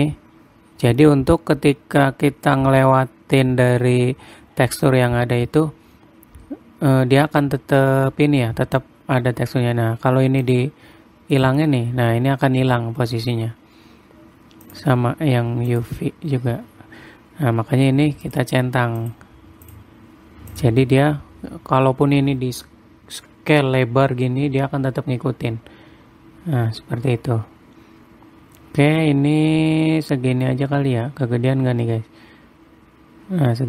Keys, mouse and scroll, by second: 0.0 click, 11.0 click, 15.2 click, 18.8 click, 20.2 click, 23.7 s.